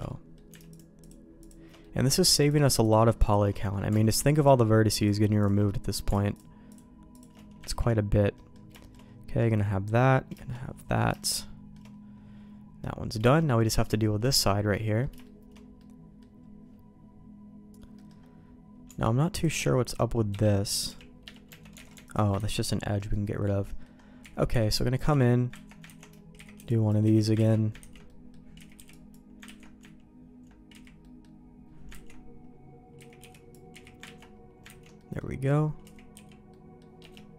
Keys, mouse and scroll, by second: 0.0 middle click, 0.7 alt+shift+click, 1.8 middle click, 2.8 alt+shift+click, 3.5 middle click, 5.6 middle click, 7.1 alt+shift+click, 8.3 middle click, 8.8 middle click, 9.3 middle click, 11.1 shift+middle click, 12.8 middle click, 13.3 middle click, 14.0 shift+middle click, 14.8 middle click, 15.2 shift+middle click, 15.7 middle click, 17.9 middle click, 18.8 Tab, 19.3 click, 19.5 f, 20.8 g, 21.4 Tab, 21.7 alt+a, 22.3 ctrl+x, 22.9 middle click, 23.6 middle click, 24.2 z, 24.5 b, 25.0 z, 25.6 ctrl+q, 25.8 ctrl+x, 26.3 z, 26.5 b, 27.0 z, 27.3 ctrl+q, 27.8 ctrl+x, 28.0 middle click, 28.5 z, 28.7 b, 29.4 ctrl+q, 30.7 z, 31.0 middle click, 32.0 ctrl+x, 32.9 z, 33.1 b, 33.7 z, 34.0 ctrl+q, 34.6 ctrl+x, 34.9 middle click, 35.8 z, 36.1 b, 37.0 Escape, 37.1-37.3 middle drag.